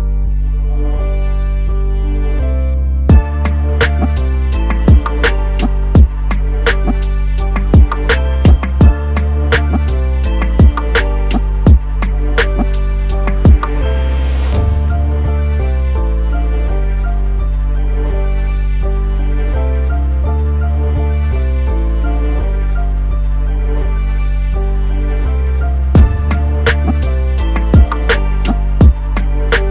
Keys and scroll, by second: 18.2 ctrl+KP_Add.